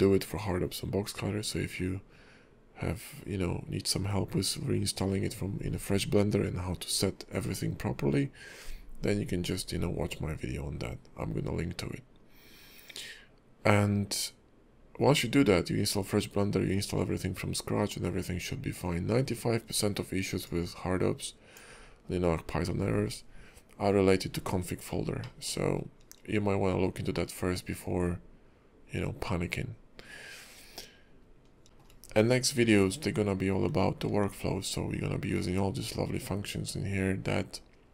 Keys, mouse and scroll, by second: 25.2 middle click, 25.7-26.5 scroll up 1, 26.5-27.3 scroll up 2, 27.3-28.3 scroll down 2, 30.6-31.3 scroll down 3, 31.3-31.6 scroll up 3, 31.6 shift+middle click, 31.6 shift+q, 34.1 q.